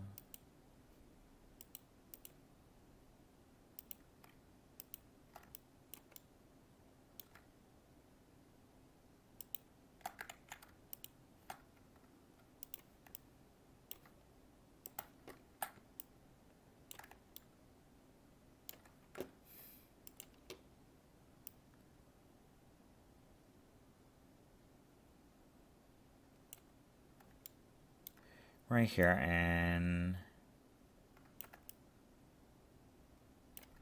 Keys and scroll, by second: 10.3 ctrl+z.